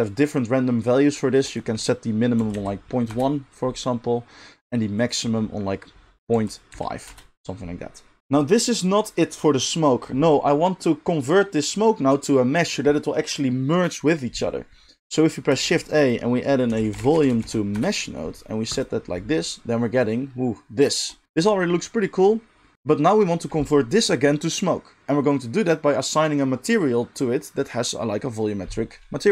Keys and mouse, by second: 15.0 ctrl+z, 15.0 ctrl+x, 15.0-21.2 middle drag, 15.6 shift+a, 21.2-29.3 drag.